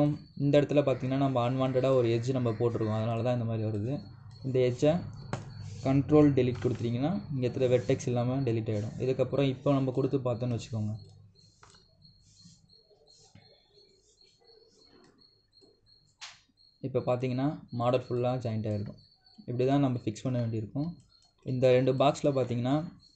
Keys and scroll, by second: 7.3 ctrl+Delete.